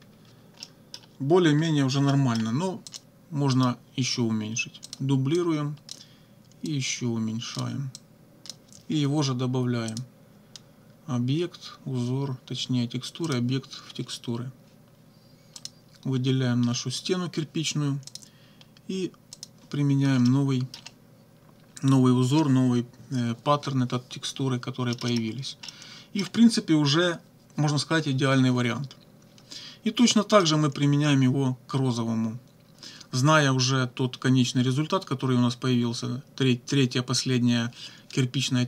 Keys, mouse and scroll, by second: 0.1 -, 0.6 click, 1.5 -, 2.1 middle click, 2.9 click, 3.5 right click, 4.9 click, 5.4 click, 6.7-7.8 drag, 8.0 click, 9.9 click, 13.3 click, 15.6 click, 18.1 click, 19.3 click, 20.3 middle click, 24.9 middle click, 25.3 click, 25.7 middle click, 30.1 middle click.